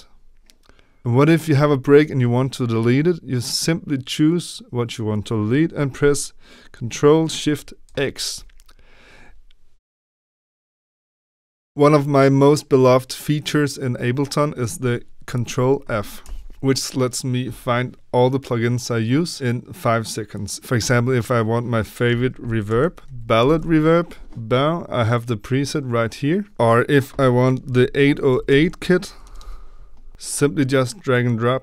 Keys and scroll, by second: 7.8 ctrl+shift+x, 16.2 ctrl+f, 22.4-24.1 typing, 26.5 ctrl+f, 27.7-29.8 typing.